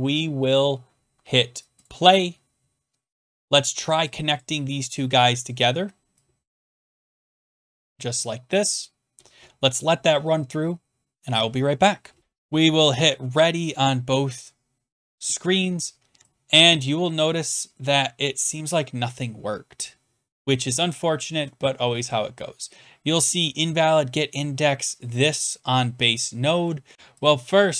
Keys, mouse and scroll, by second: 1.8 click, 3.4 click, 4.4 click, 5.3 click, 6.5 click, 6.8 click, 7.3 click, 8.8 click, 13.7 click, 14.5 click, 18.7 click, 20.4 click, 21.3 click, 22.1 click, 26.9 click, 27.2 click.